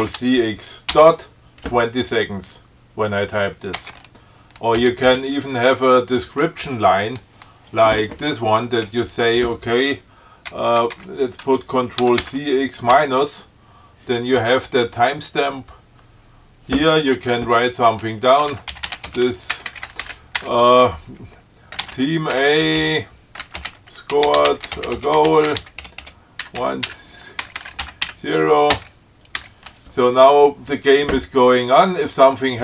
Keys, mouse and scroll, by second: 0.1 ctrl+c, 0.3 ctrl+x, 1.2 ., 4.1 Return, 5.1 space, 10.8 BackSpace, 12.3 ctrl+c, 12.5 ctrl+x, 13.2 -, 18.6-19.8 typing, 21.9-28.9 typing, 29.0 Return.